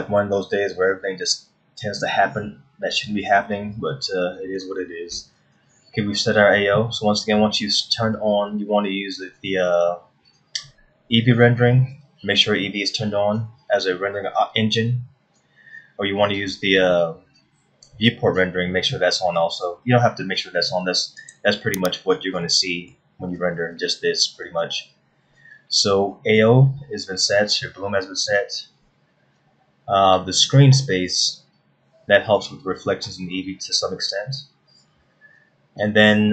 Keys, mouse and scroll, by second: 13.1-13.9 scroll up 6, 21.8 click, 22.5-22.9 scroll down 2, 23.1 middle click, 30.8-32.7 scroll down 10, 33.5-34.0 scroll up 1.